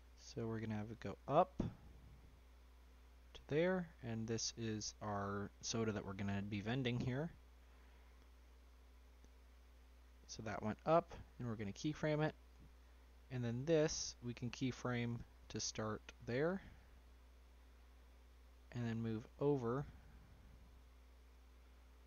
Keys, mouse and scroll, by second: 3.8 click, 4.7-5.9 scroll up 1, 5.9 scroll up 1, 6.0 click, 6.5 shift+middle click, 7.0-10.2 scroll up 3, 7.2 middle click, 10.2 click, 11.5 click, 12.7 click, 13.4 click, 14.2 click, 17.9-20.1 drag, 21.3-22.0 drag.